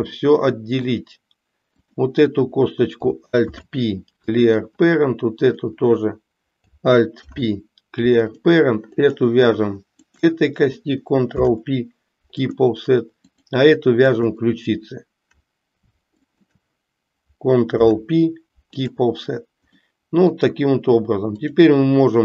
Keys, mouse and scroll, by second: 0.1 middle click, 1.9 click, 3.4 alt+p, 5.4 click, 7.1 alt+p, 10.0 shift+click, 11.3 ctrl+p, 13.3 click, 14.1 click, 16.4 shift+click, 17.7 ctrl+p, 19.9 middle click.